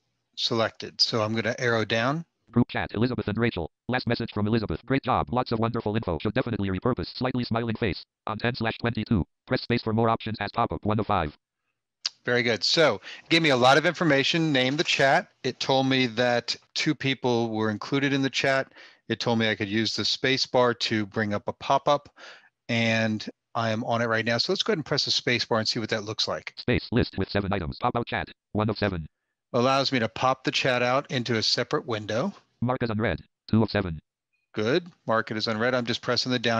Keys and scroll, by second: 24.3 space, 25.6 space.